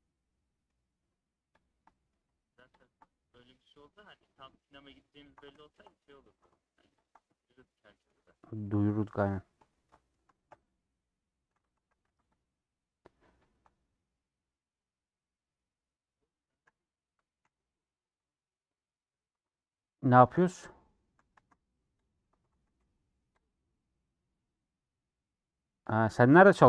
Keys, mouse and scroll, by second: 1.9 middle click, 3.8-5.2 middle drag, 5.5-7.0 shift+middle drag, 7.4 middle click, 8.7-10.5 middle drag, 10.5 scroll up 3, 11.8 a, 12.4 u, 13.1-13.5 scroll up 2, 13.5 middle click, 14.1 scroll up 1, 15.0-16.7 middle drag, 16.7 scroll down 5, 17.4 /, 18.4-19.3 scroll down 9, 19.3 Tab, 20.1 alt+h, 20.7 click, 21.0 a, 22.1 ctrl+a, 22.4 Tab, 25.2 u, 26.6 click.